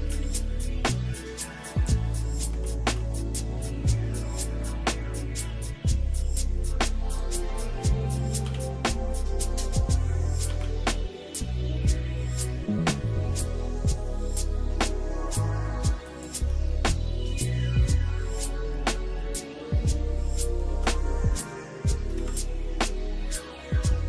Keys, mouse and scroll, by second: 2.5 g, 8.5 e, 10.5 alt+s, 16.7 shift+middle click, 17.8 shift+middle click, 18.4 shift+middle click, 18.9 shift+middle click, 21.3 ctrl+KP_Add, 22.1 ctrl+KP_Add.